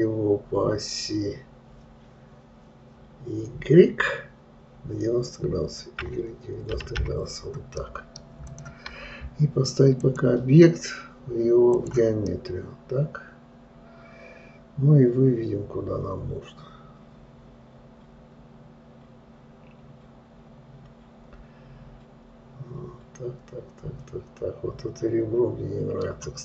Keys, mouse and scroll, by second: 10.4-12.7 drag, 12.7-15.7 middle drag.